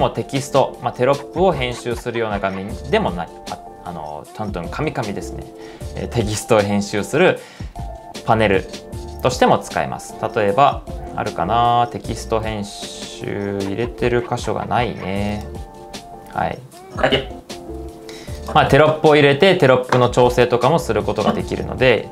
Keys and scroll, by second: 16.6-17.4 typing.